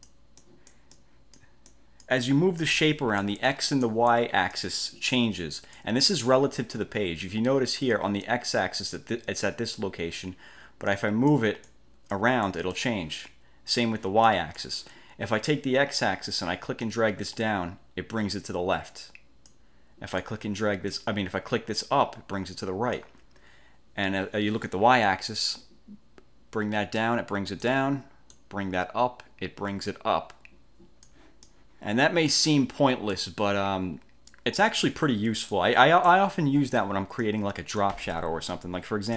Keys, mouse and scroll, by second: 0.5 click, 11.0-11.6 drag, 11.8-12.5 drag, 12.6 click, 14.4 click, 17.0 click, 20.3 click, 25.1 click, 28.5 click, 31.5-33.4 drag, 35.6-36.4 drag, 37.4 click.